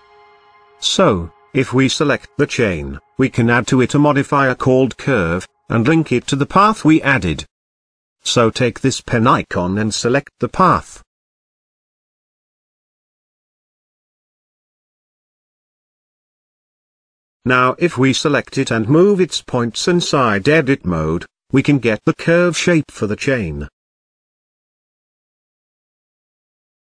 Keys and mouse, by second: 1.7 click, 2.9-4.7 drag, 6.1 click, 8.9 click, 14.1 click, 14.8 middle click, 15.1 middle click, 15.2 middle click, 16.1 Tab, 20.7 click, 21.5 click, 22.5 click, 23.1 click, 24.3 g, 24.6 z.